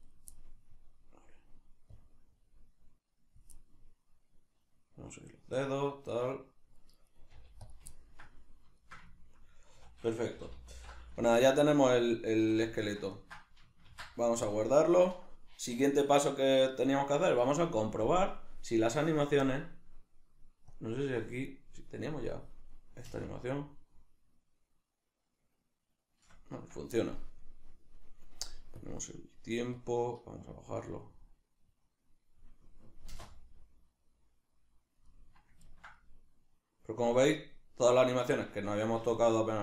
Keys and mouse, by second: 0.0 right click, 0.4-1.9 middle drag, 1.9-3.5 drag, 3.5-7.1 middle drag, 7.1 right click, 7.3 g, 7.7 click, 7.9-10.8 ctrl+middle drag, 9.7 a, 10.4 g, 10.8 alt+r, 12.4 a, 12.9 middle click, 13.9 ctrl+s, 17.9-19.4 middle drag, 19.4-22.6 drag, 22.6-23.1 middle drag, 23.1 space, 26.6 Escape, 28.8 click, 29.8-35.1 drag, 33.1 space, 35.1-39.6 middle drag.